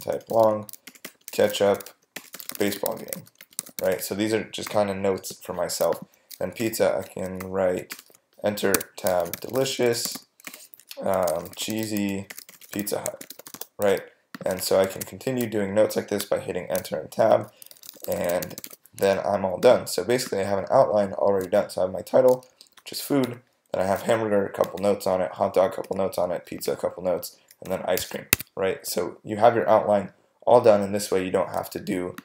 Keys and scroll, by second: 0.0-4.6 typing, 6.6 Return, 7.4 shift+BackSpace, 7.9 Return, 8.7 Tab, 8.9-14.1 typing, 14.6 Return, 14.9 Tab, 17.5-19.1 typing, 23.2 Right, 24.7 Right, 28.3 Escape.